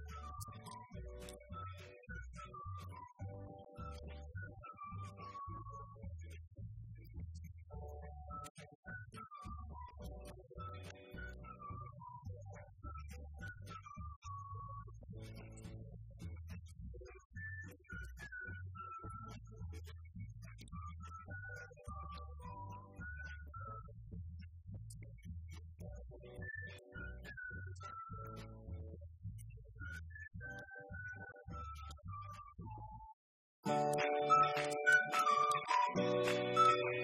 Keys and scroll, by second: 0.8 BackSpace, 1.8 Left, 3.0-4.4 typing, 4.5 Return, 4.9 Up, 5.1 Left, 7.3 shift+Down, 10.1 ctrl+d, 10.8 Right, 11.2 Left, 13.2 Right, 14.6 Left, 15.1 shift+Right, 25.0 shift+Right, 25.5 shift+Down, 26.8 shift+Up, 28.0 ctrl+d, 28.7 Left, 29.1 Down, 29.2 Left, 30.7-36.5 typing, 32.2 Return, 32.4 Up, 32.5 Right, 35.1 Up, 35.3 Right.